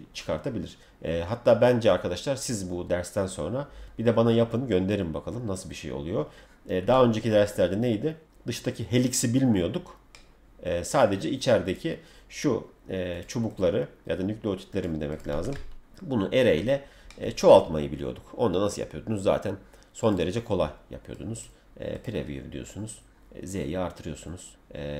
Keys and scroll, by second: 15.3 Escape.